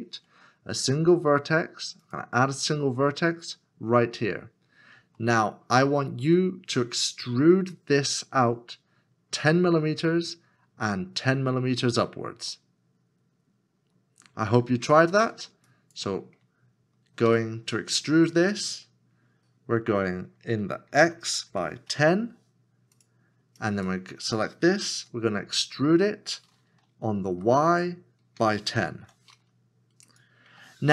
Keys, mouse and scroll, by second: 5.2 shift+middle click, 17.4 e, 20.9 e, 21.5 1, 22.0 0, 25.4 0, 25.6 e, 27.3 y, 28.4 1, 29.0 0.